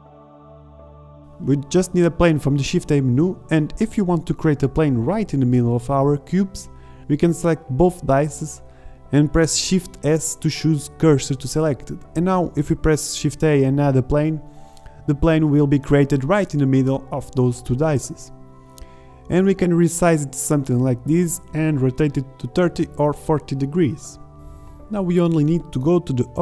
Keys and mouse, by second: 0.4 g, 1.3-1.9 drag, 2.0 g, 2.6-3.1 drag, 3.2 click, 3.4 z, 3.7 r, 4.3 KP_Decimal, 4.7 middle drag, 4.7 z, 5.9 ctrl+z, 7.9 shift+s, 14.0 shift+a, 16.6 s, 18.7 s, 20.6 r, 23.0-23.8 middle drag, 23.8-24.3 drag, 24.9-25.3 drag, 25.4-26.1 middle drag.